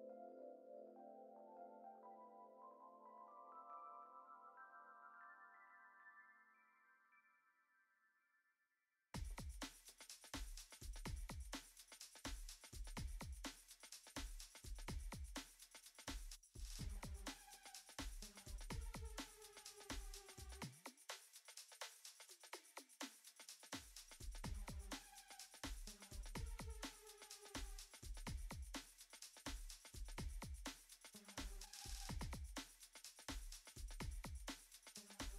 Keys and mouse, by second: 0.0 middle click, 0.6 ctrl+z, 1.2 shift+click, 1.5 middle click, 1.9 shift+click, 2.7 alt+shift+z, 2.8 shift+click, 3.5 shift+click, 5.1 shift+click, 6.4 shift+click, 7.1 alt+z, 7.1 middle click, 7.9-8.3 drag, 8.6 click, 9.0 ctrl+Tab, 9.4 middle click, 9.8 middle click, 10.2 click, 12.4 Tab, 13.0 alt+z, 13.1 shift+click, 13.8-15.2 shift+drag, 15.6 shift+click, 16.3 click, 16.7 ctrl+Tab, 17.7 shift+middle click, 18.2-19.2 middle drag, 19.2 click, 20.9 middle click, 22.4 click, 24.6-25.7 drag, 26.0-26.6 drag, 27.0 shift+a, 28.8-29.1 middle drag, 29.5 Tab, 30.1 ctrl+r, 31.6 shift+middle click, 32.1 middle click, 33.1 KP_3, 34.0 alt+z, 35.0 alt+z, 35.0 k.